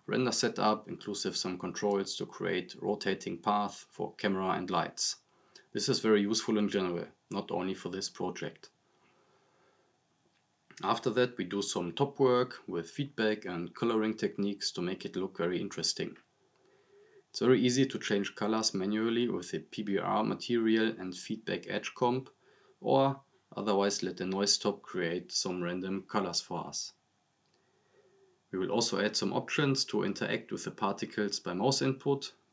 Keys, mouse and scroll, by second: 0.1-0.8 click, 1.2 scroll up 1, 1.6 click, 2.8-3.4 right drag, 7.1 scroll down 1, 7.6-8.3 click, 8.8 click, 9.3 scroll up 1, 10.0-10.9 click, 11.2 scroll down 1, 12.2-13.8 right drag, 14.6 scroll up 1, 15.2-15.8 drag, 28.9 scroll down 1, 29.6 click, 30.9 scroll up 1, 31.6 scroll down 1, 32.0 click.